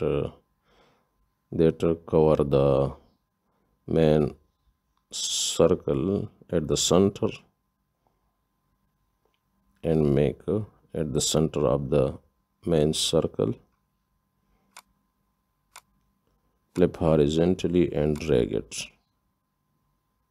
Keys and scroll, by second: 9.1 ctrl+g, 11.3 ctrl+d.